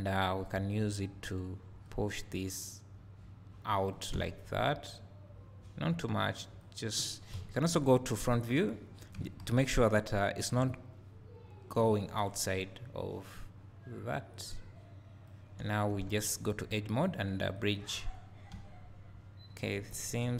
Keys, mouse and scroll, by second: 1.9-5.0 drag, 5.2 click, 7.3-10.7 drag, 10.6 ctrl+KP_1, 12.7-17.1 drag, 12.7-14.3 scroll down 1, 15.6 `, 16.1 2, 16.4 scroll up 1, 18.5 `.